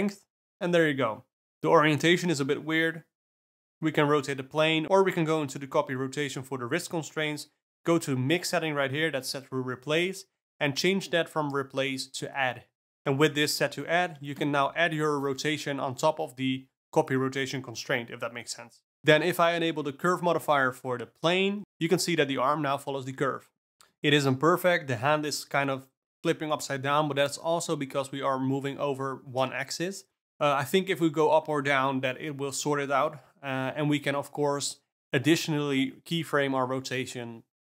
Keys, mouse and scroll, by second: 0.8-2.9 drag, 2.9-5.9 alt+middle drag, 7.3 r, 7.9-9.3 drag, 9.3 r, 10.0 alt+r, 11.4 r, 12.0 r, 15.7 click, 17.9 click, 19.3 click, 20.1-20.7 ctrl+middle drag, 20.7 g, 33.6 alt+p, 33.8 Tab, 34.3 click, 34.5 click, 34.9 Tab, 35.6 click, 36.1 g.